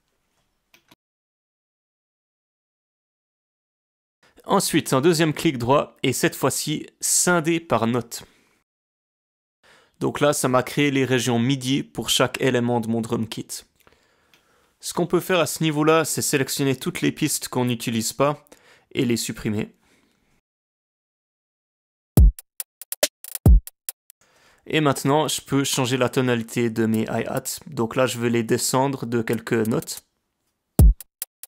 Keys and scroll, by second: 14.4 BackSpace, 15.8 BackSpace, 20.9 BackSpace, 22.1 space, 24.0 space, 29.2 alt+Down, 29.6 alt+Down, 29.7 alt+Down, 30.7 space.